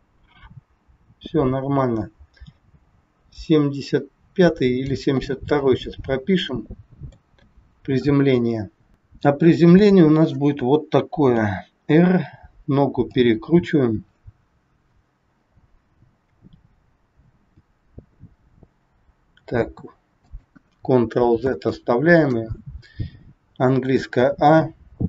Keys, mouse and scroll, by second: 5.6-6.2 scroll up 9, 6.2 middle click, 8.9 shift+middle click, 8.9 scroll up 1, 9.6 click, 11.4 r, 21.5 ctrl+z, 24.0 a.